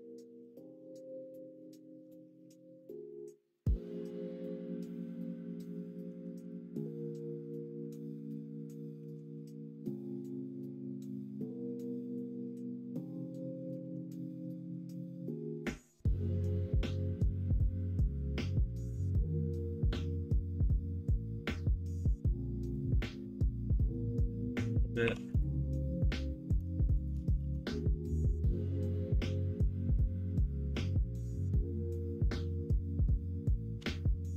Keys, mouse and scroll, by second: 2.4 shift+middle click, 3.0 middle click, 3.9 middle click, 4.6 middle click, 5.1 middle click, 5.6 ctrl+z, 8.2 l, 8.9 s, 13.8 alt+z, 14.1 scroll up 1, 14.3-15.6 middle drag, 16.5 KP_1, 16.8 KP_3, 17.7 KP_1, 19.4 alt+z, 21.9 click, 24.1 click, 24.1 middle click, 27.3 alt+z.